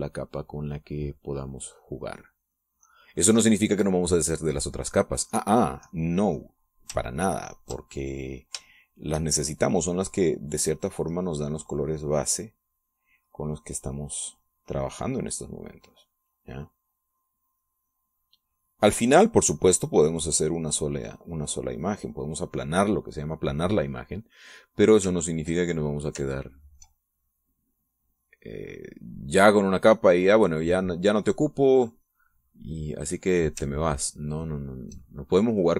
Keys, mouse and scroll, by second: 0.5-4.5 drag, 6.1 click, 8.5 ctrl+click, 10.1 shift+click, 10.7-14.5 shift+drag, 14.6 click, 15.2-24.1 drag, 24.7 middle click, 25.0-26.4 scroll up 1, 26.4 ctrl+scroll up 1, 26.6 ctrl+click, 27.8 ctrl+click, 28.5-33.1 ctrl+drag, 33.8 click, 35.2-35.7 ctrl+drag.